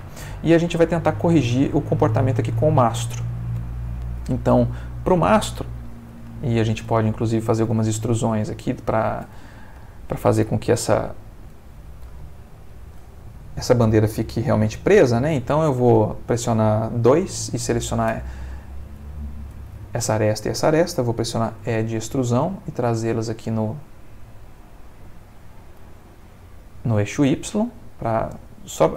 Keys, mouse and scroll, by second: 3.6 Escape, 4.5 click, 6.4-7.8 shift+middle drag, 7.9 ctrl+shift+Tab, 8.6 Tab, 9.0 click, 9.8 shift+middle click, 10.5 shift+click, 11.0 shift+click, 12.3 shift+middle click, 12.9-13.8 shift+scroll up 3, 15.8 F2, 16.6 Escape, 17.1 2, 19.0 shift+click, 21.7 e, 25.2 click, 26.3-28.9 middle drag.